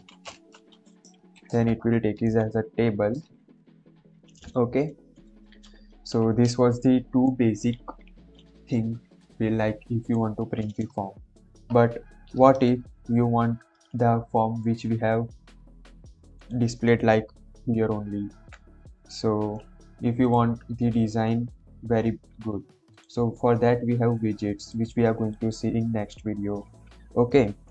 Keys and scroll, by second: 0.0-1.1 typing, 11.7 BackSpace, 12.6 ctrl+s, 22.0 ctrl+/, 26.6 ctrl+/.